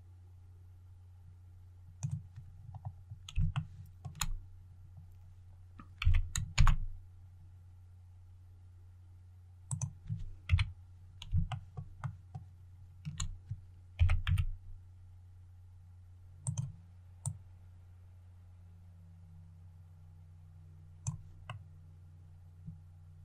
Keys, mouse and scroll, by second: 2.4 scroll up 1, 3.4 shift+middle click, 4.4 scroll up 1, 5.9-6.2 scroll up 1, 6.4 shift+z, 9.6 click, 10.4 KP_1, 11.4 shift+middle click, 11.9 shift+middle click, 13.8 shift+s, 14.1 shift+z, 16.3-20.9 drag, 21.3-23.2 middle drag.